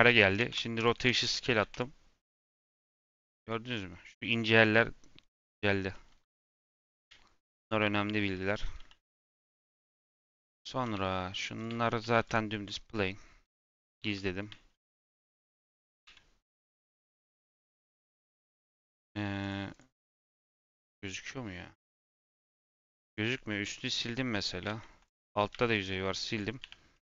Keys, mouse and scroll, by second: 0.0 Tab, 0.3 ctrl+a, 0.9 Tab, 1.1 a, 3.4 middle click, 3.7-5.3 scroll down 2, 5.3 Tab, 5.9-7.0 middle drag, 7.0 /, 7.8 /, 8.1 scroll down 1, 8.7 h, 9.0-10.1 middle drag, 10.1 click, 10.3 click, 10.7 g, 11.6 Tab, 11.8 a, 12.1 u, 12.5 Tab, 13.4 h, 13.7 scroll down 3, 13.9 middle click, 14.1 scroll up 1, 14.4 middle click, 15.0 click, 16.0 /, 16.3 middle click, 16.5 scroll down 1, 16.8 Tab, 17.1 middle click, 17.5 a, 17.8 scroll up 2, 18.0 3, 19.3 click, 19.6 click, 21.4 scroll up 1, 21.5-22.7 middle drag, 22.7 x, 23.5-24.6 middle drag, 25.0 click, 25.5 x, 27.0 click.